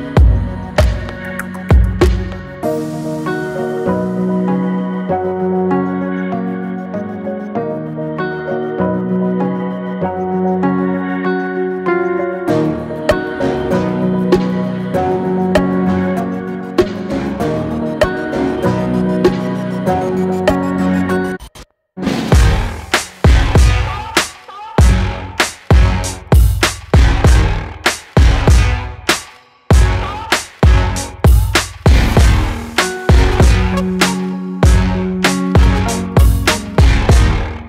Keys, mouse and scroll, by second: 0.0 alt+shift+click, 0.7 alt+shift+click, 1.4 alt+shift+click, 1.9 alt+shift+click, 2.4 alt+shift+click, 3.7 s, 8.9-9.2 scroll down 2, 9.2 middle click, 9.7 Tab, 10.2 click, 10.7-11.4 middle drag, 11.4 Tab, 12.0-12.7 scroll up 3, 12.7 alt+click, 13.5 alt+shift+click, 14.2 alt+shift+click, 14.8 alt+shift+click, 15.8 alt+shift+click, 17.5 shift+middle click, 18.2 alt+shift+click, 18.8 alt+shift+click, 19.4 alt+middle click, 19.6 alt+middle click, 20.0-20.8 scroll up 5, 20.8 shift+middle click, 21.1-22.3 scroll up 1, 22.3 ctrl+b, 24.7 scroll down 4, 25.2 middle click, 26.1 scroll down 2, 26.4-28.4 middle drag, 29.5 alt+middle click, 30.7 middle click, 31.7 scroll down 2, 32.0-34.0 middle drag, 34.2 alt+middle click, 35.2 alt+z, 35.6-37.0 shift+middle drag, 37.0 ctrl+click.